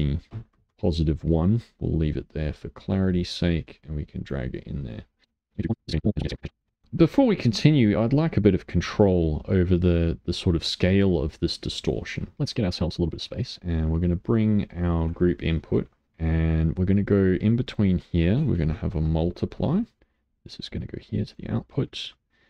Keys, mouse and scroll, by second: 4.6 middle click, 5.1 click, 5.8 click, 5.9 middle click, 6.3 middle click, 6.5 g, 6.6 middle click, 6.7 click, 6.8 click, 10.3 middle click, 10.7 scroll down 1, 11.3-12.3 drag, 12.5-15.0 middle drag, 15.0 click, 15.6 shift+d, 16.0-17.1 middle drag, 17.1-21.8 drag, 21.8-22.4 middle drag.